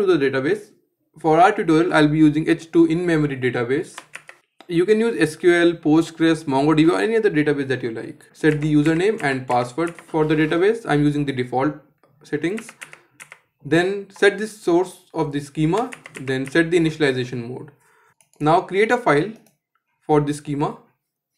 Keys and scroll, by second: 3.7 ctrl+z, 8.2 ctrl+z.